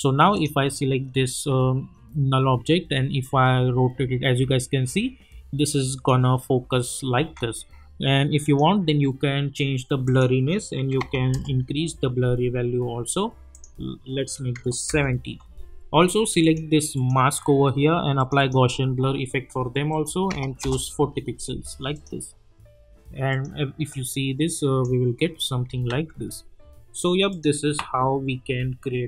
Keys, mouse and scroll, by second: 3.2-6.3 drag, 7.2 ctrl+z, 8.4 click, 11.3 Return, 13.5 click, 14.9 Return, 16.4 click, 20.6 Return, 21.9-24.8 drag, 25.9 ctrl+z, 27.3 click.